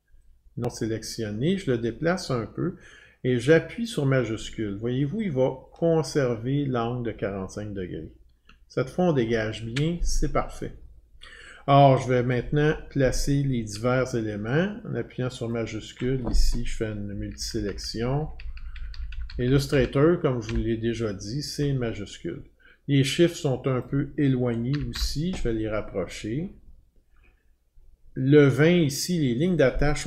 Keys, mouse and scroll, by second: 3.4 click, 9.2 shift+click, 12.3 click, 15.5 shift+click, 17.1 Down, 17.3 Down, 17.5-20.5 scroll down 15, 20.5 scroll down 1, 23.8 Up, 23.8 click, 24.7 Down, 25.0 Down, 25.7 scroll down 7, 25.9-26.5 scroll, 27.1 scroll, 28.8 click, 29.5 click, 29.5-30.0 scroll down 10.